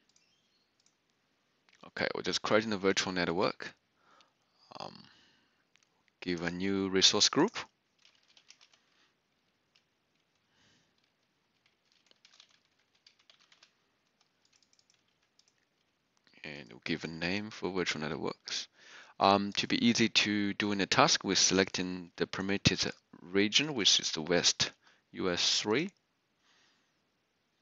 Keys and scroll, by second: 7.9-8.9 typing, 11.4-15.5 typing, 17.1 ctrl+v, 23.5-24.2 typing, 25.5 typing.